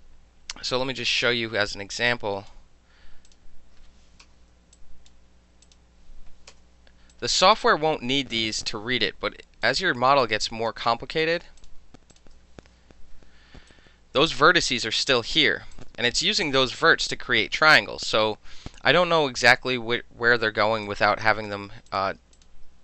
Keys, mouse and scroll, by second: 1.1 click, 2.1 click, 3.3 click, 4.8 click, 5.7 click, 6.6 KP_Enter, 7.1 click, 8.3 click, 9.7 click, 10.2-10.7 right drag, 11.2 click, 11.6 shift+click, 12.1 shift+click, 13.1 Delete, 13.7-14.3 right drag, 14.7 click, 15.3 shift+click, 15.8 shift+click, 20.9 alt+click, 21.9 click, 22.4 shift+click.